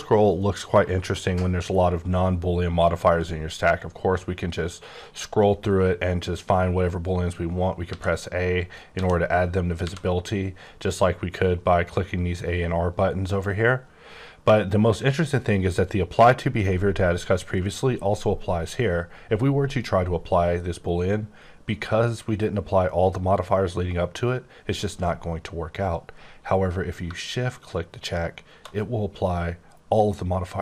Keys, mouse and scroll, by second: 3.8-5.0 scroll up 10, 5.0-7.8 scroll up 16, 7.8 a, 8.2-8.9 scroll up 2, 8.9 a, 9.3-9.8 scroll up 1, 9.8 a, 28.0 shift+click.